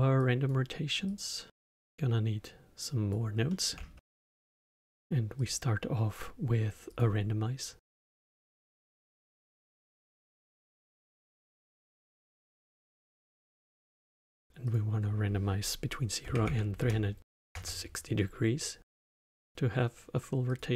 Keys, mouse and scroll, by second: 0.1 click, 1.0-3.5 drag, 3.5-4.0 middle drag, 4.0 shift+a, 9.2-11.3 drag, 12.2-13.5 drag, 13.5-14.4 scroll up 1, 14.6-17.7 drag, 20.5-20.7 drag.